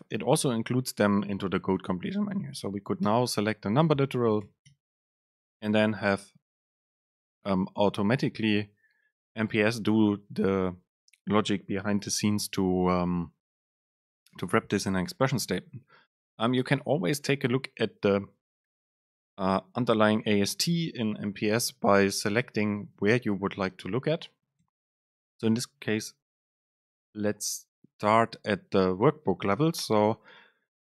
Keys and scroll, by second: 16.5 shift+Down, 19.1 shift+Up, 21.6 Down, 22.2 Up.